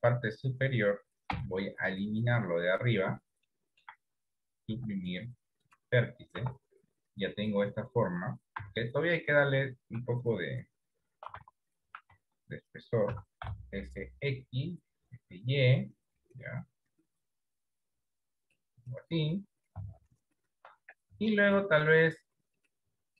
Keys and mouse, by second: 1.6 b, 3.7 shift+middle click, 5.1 Delete, 6.7 Tab, 8.8 z, 11.6 s, 13.4 s, 21.4 Tab.